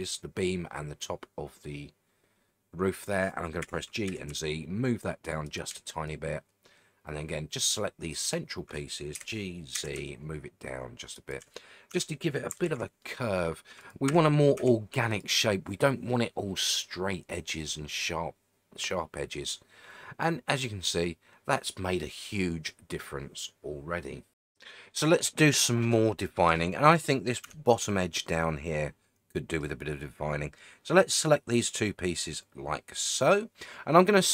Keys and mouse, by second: 3.6 g, 4.1 z, 5.5 shift+click, 6.2-7.7 drag, 9.1 g, 9.7 z, 11.1 shift+click, 11.9 Tab, 12.6 alt+z, 13.0-13.5 middle drag, 13.8 click, 14.1 a, 14.6 a, 15.1 click, 16.1-16.8 middle drag, 17.5-21.6 middle drag, 27.4 Tab, 27.9-29.6 middle drag, 31.3 click, 33.3 middle click.